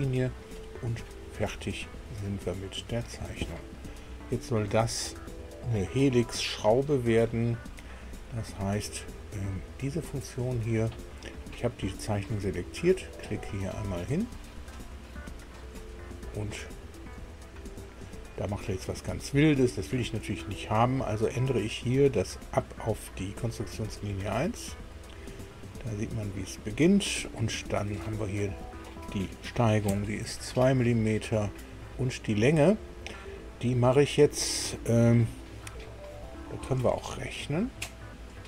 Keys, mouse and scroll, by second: 1.8 click, 3.8-4.3 scroll up 1, 4.7-6.1 middle drag, 13.2 click, 21.9 click, 23.4 click, 28.1 click, 29.9 KP_2, 30.2 Tab, 32.4 click, 38.3 click.